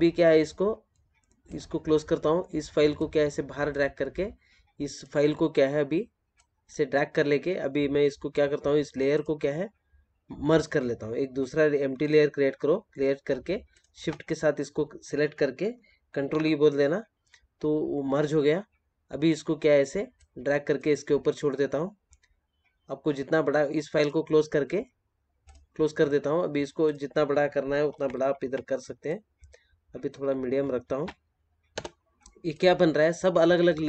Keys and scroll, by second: 16.1 ctrl+e, 27.7 ctrl+t.